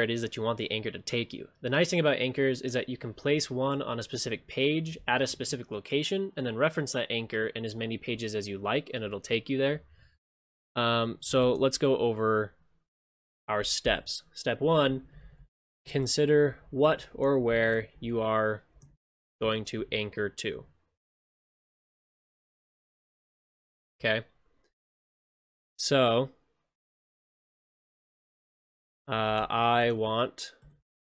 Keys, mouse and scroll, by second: 11.5 ctrl+shift+space.